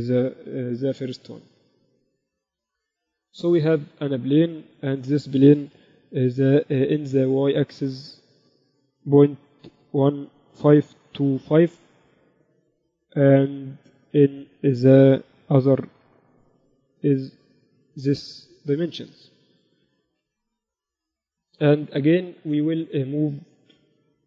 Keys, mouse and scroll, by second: 1.1 KP_1, 3.9 click, 4.1 shift+a, 4.4-5.5 drag, 6.4 n, 7.7-10.5 drag, 14.1-15.9 drag, 20.9 n, 22.2-24.2 middle drag.